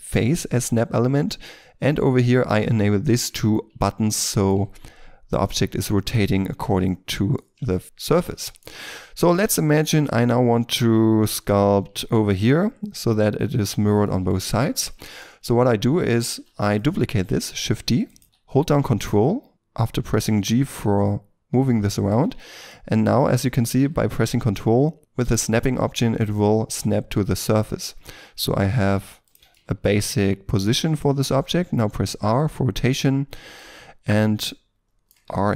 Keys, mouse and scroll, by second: 4.3 shift+middle click, 5.9 shift+middle click, 6.8 middle click, 7.4-7.7 scroll down 1, 7.7 shift+middle click, 7.8 middle click, 8.4 shift+middle click, 9.5 shift+middle click, 10.0 shift+scroll up 2, 10.3 middle click, 11.5-12.3 scroll up 1, 14.0 middle click, 14.5-15.2 scroll down 1, 15.2 shift+middle click, 15.2-16.2 shift+scroll up 1, 16.2 g, 18.2 g, 22.3-22.7 ctrl+scroll up 2, 22.7 middle click, 23.8 g, 29.5 ctrl+middle click, 31.6 r, 32.7-33.5 scroll down 1, 33.5 middle click, 35.2 r.